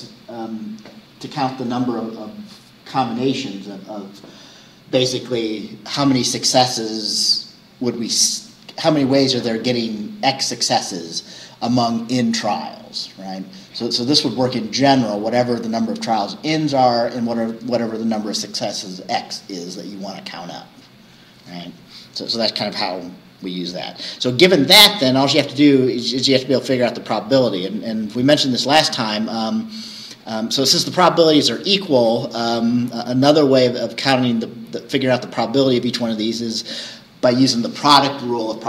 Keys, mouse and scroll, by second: 25.2 scroll up 2.